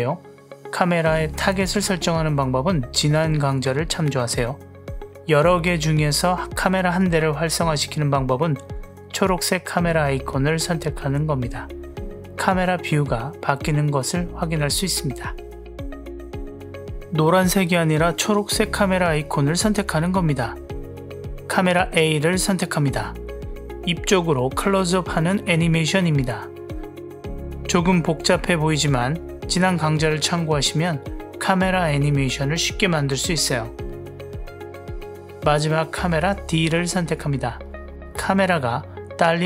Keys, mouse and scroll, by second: 1.3 click, 1.9 g, 11.3 click, 13.6 click, 15.5 click, 19.6 click, 33.7 click, 35.8 click.